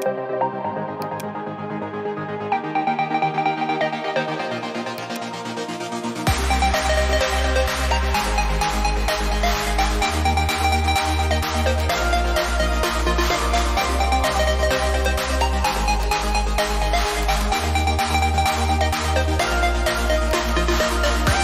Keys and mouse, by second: 4.8 click, 9.4-10.2 typing, 11.8 click, 14.2 x, 14.8 click, 20.2 click.